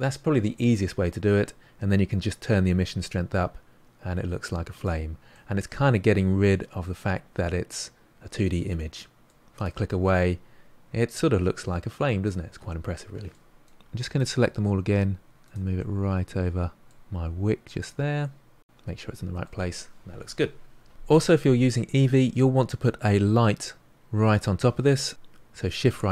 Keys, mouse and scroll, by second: 2.2-5.3 drag, 5.3-8.3 middle drag, 9.6 click, 10.0-14.0 middle drag, 14.0 click, 14.5 g, 15.2-16.3 middle drag, 16.3 g, 17.0-18.5 middle drag, 18.5 g, 19.0-25.6 middle drag, 25.6 shift+right click.